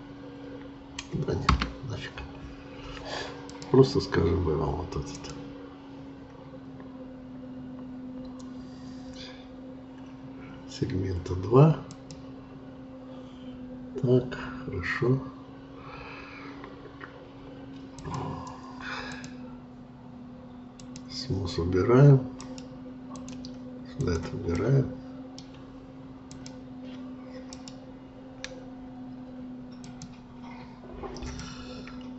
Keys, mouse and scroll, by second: 3.4-7.5 drag, 7.5-8.1 scroll down 1, 8.1-9.4 scroll up 1, 9.4-11.1 scroll up 1, 11.9-22.3 drag, 22.3-23.9 right drag, 23.9 click, 24.6-26.3 middle drag, 26.3-27.5 drag, 27.5-30.6 right drag, 31.4-32.1 middle drag.